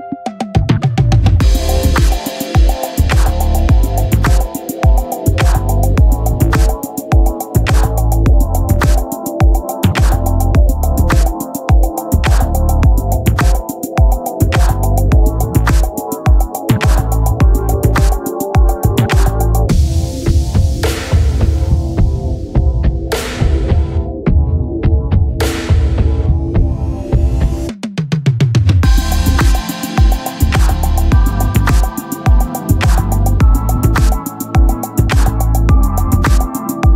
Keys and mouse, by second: 0.4 click, 22.1 click, 27.1 click, 34.8 click.